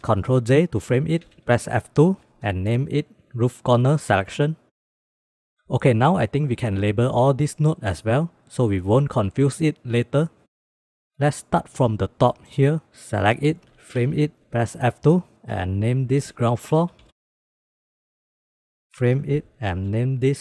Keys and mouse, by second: 1.1 ctrl+j, 1.8 F2, 2.6 o, 5.8-6.2 drag, 11.1 click, 11.9 click, 12.7 click, 14.0 ctrl+j, 14.4 F1, 14.5 F2, 16.9 o, 17.8 click, 18.0 click, 18.2 click, 19.2 ctrl+j, 19.5 F2.